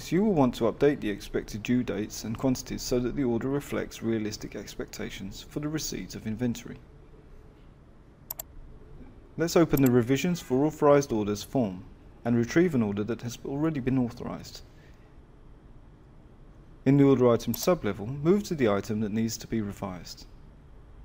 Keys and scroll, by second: 12.8 F11, 14.9 Return.